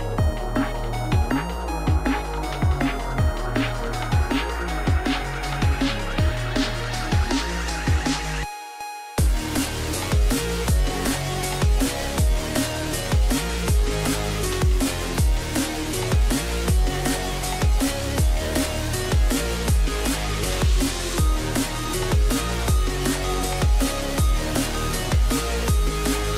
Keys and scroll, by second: 0.5 ctrl+z, 0.8 KP_1, 1.4 KP_1, 2.7 KP_1, 4.2 KP_1, 4.4 ctrl+r, 4.9 KP_1, 7.1 KP_3, 7.6 1, 8.4 1.